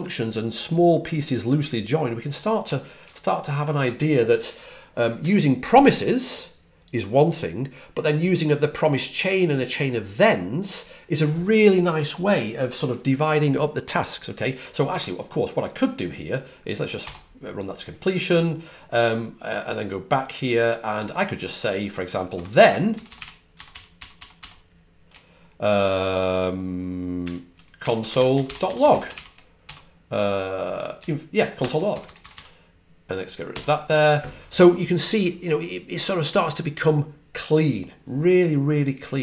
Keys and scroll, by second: 16.7-17.4 typing, 22.2-24.8 typing, 27.6-29.3 typing, 30.9-32.6 typing, 33.4 F9.